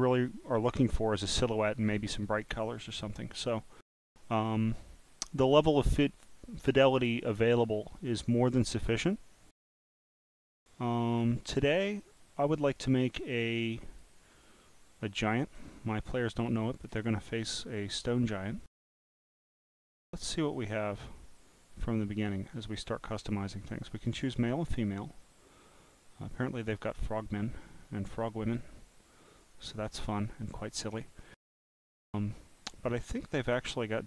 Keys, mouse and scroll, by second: 5.4 click, 6.6 click, 7.2-8.0 scroll down 2, 8.0-9.1 drag, 9.8-10.3 scroll up 7, 11.9 click, 12.8-13.2 scroll up 1, 13.5 click, 14.5 click, 16.0 scroll up 2, 16.5 click, 17.1 scroll up 1, 19.7 click, 22.8 click, 26.7 click, 28.4 click, 29.4-31.0 drag, 32.0 scroll down 1, 33.2 scroll up 1, 33.6 scroll down 1.